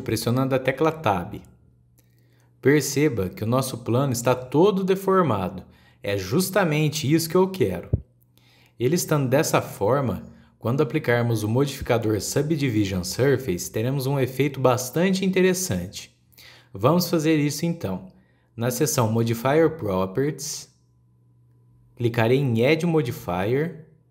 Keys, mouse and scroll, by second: 1.7 Tab, 2.3-4.4 middle drag, 4.4-4.7 scroll up 3, 4.7-6.0 middle drag, 6.0 scroll down 3, 6.4-9.7 middle drag, 9.7-10.0 scroll down 1, 10.0-13.0 middle drag, 13.1-13.9 scroll down 1, 13.9 KP_1, 14.8-18.0 middle drag, 21.8 click.